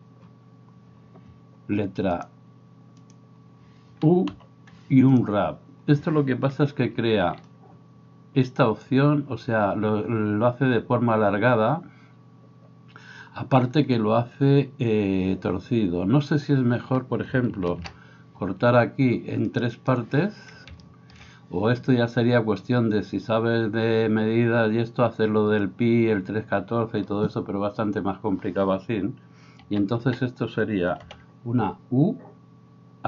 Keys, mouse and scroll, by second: 3.4-19.9 drag, 4.3 u, 6.6 a, 6.9 a, 7.2 a, 17.7 ctrl+r, 19.9-22.8 right drag, 29.7-33.0 right drag, 29.7 a, 30.0 a, 31.1 u.